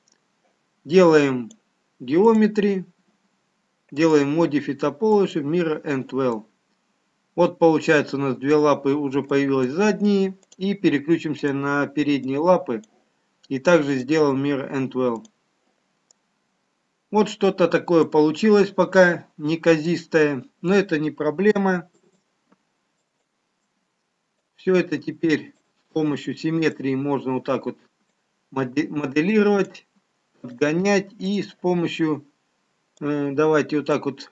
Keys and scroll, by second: 29.9 x.